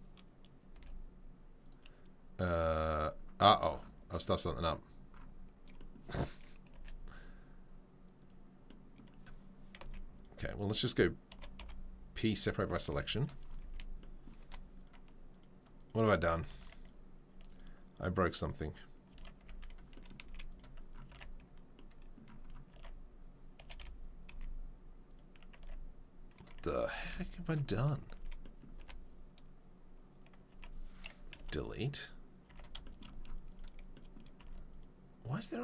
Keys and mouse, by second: 0.7 g, 6.7 g, 9.8 z, 11.3 o, 11.6 p, 12.8 z, 13.6 a, 14.4 3, 14.7 click, 14.8 middle click, 15.3 click, 15.4 middle click, 15.7 click, 15.9-23.6 middle drag, 16.1 3, 16.5 Tab, 17.4 click, 18.4 click, 19.1 Tab, 19.4 a, 20.2 z, 21.1 Tab, 22.7 Tab, 23.6 g, 25.6 Tab, 26.8 Tab, 27.1 z, 28.1 a, 28.8 3, 30.5 Tab, 30.8 click, 31.4 Delete, 32.0 click, 32.0-34.7 middle drag, 32.5 Tab, 34.4 Tab, 34.8-35.6 middle drag.